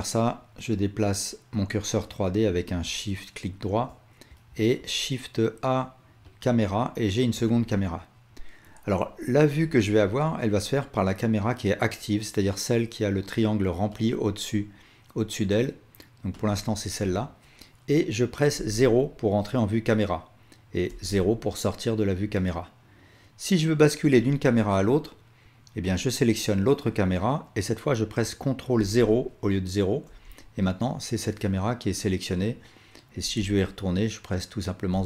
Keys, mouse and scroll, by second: 4.5 shift+a, 9.8-14.1 alt+drag, 15.4 click, 18.6 KP_0, 20.9 KP_0, 25.9 click, 28.8 ctrl+KP_0, 30.1 KP_0, 33.3 KP_0, 34.9 KP_0.